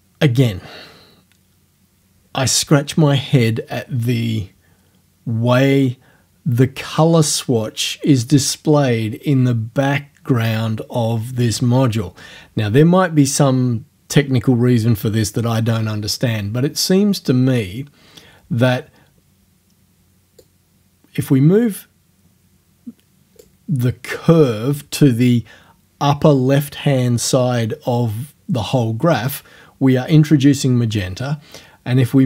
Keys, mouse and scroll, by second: 20.4-23.6 drag.